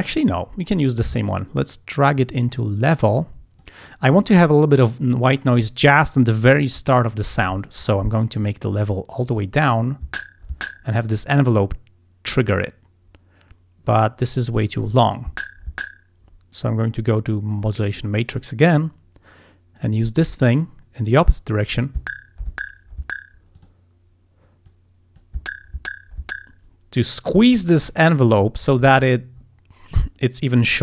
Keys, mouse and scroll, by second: 1.4-3.9 drag, 8.5 click, 14.6 click, 18.3 click, 20.0-21.6 drag, 23.6 click, 24.7 click, 28.5-29.3 scroll up 2, 29.4 scroll down 2.